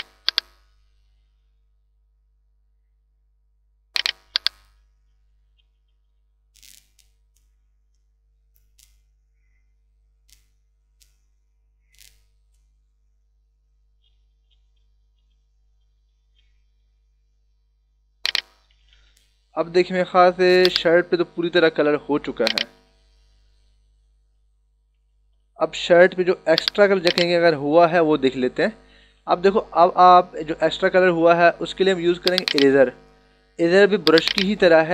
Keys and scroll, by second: 23.0 ctrl+-, 24.9 ctrl+=.